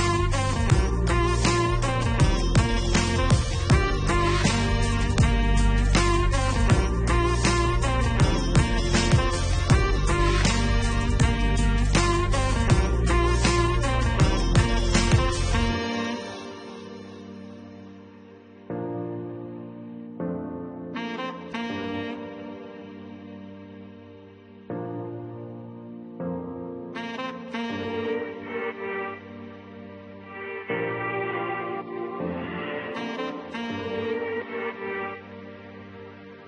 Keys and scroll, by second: 8.6 5, 9.3 8, 10.1 1, 14.5 8, 15.3 2, 16.3 9, 21.4 8, 21.6 7, 22.3 0.